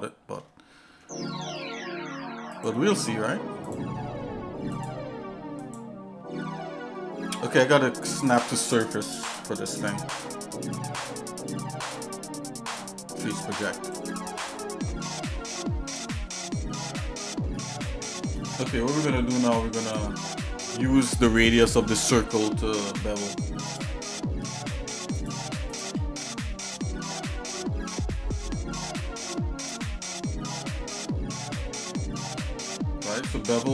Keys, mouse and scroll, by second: 0.9 Tab, 1.5 scroll up 3, 2.5 click, 3.9 click, 4.7 click, 5.6 click, 8.2-14.5 drag, 15.9 click, 16.9 Tab, 17.5 middle click, 18.0 shift+middle click, 18.6 Tab, 19.8 click, 21.3 middle click, 22.4 scroll down 1, 22.4 scroll up 1, 22.5 scroll down 1, 26.6 middle click, 28.2-28.5 scroll down 2, 29.6 click, 30.6-31.0 scroll down 2, 30.7 scroll up 1, 32.7 scroll down 1.